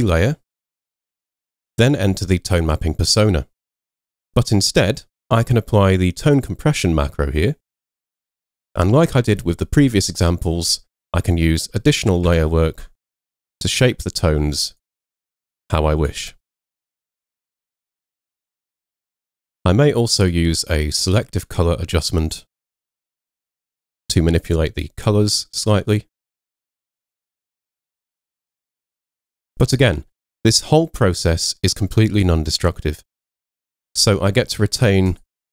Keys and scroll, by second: 12.3 super+m.